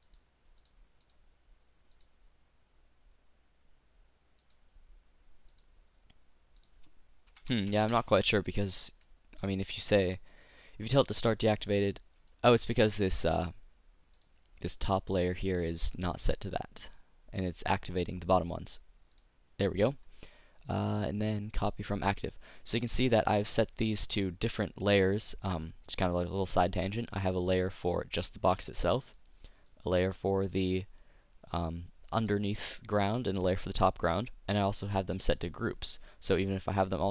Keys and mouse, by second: 9.3 middle click, 9.5-11.6 right drag, 12.7-14.2 middle drag, 14.2-16.3 drag, 14.2 right click, 23.1 click, 23.5 middle click, 23.9 a, 27.8-32.3 middle drag, 33.4-35.3 drag, 35.3 middle click.